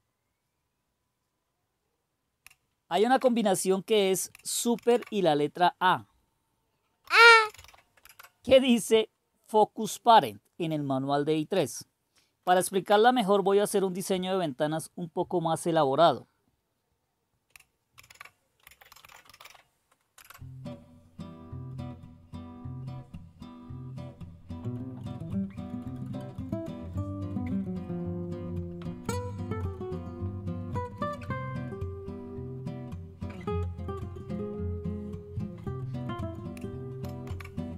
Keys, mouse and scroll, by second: 2.9 super+v, 4.7 super+d, 6.8-8.1 typing, 12.4 super+Return, 18.0 super+d, 18.4-19.9 typing, 20.1 Return, 37.0 super+a.